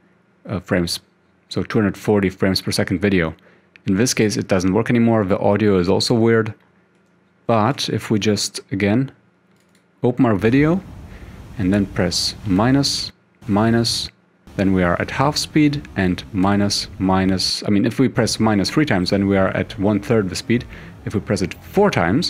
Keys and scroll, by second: 7.8 ctrl+q, 12.6 -, 13.5 -, 16.5 -, 21.8 -.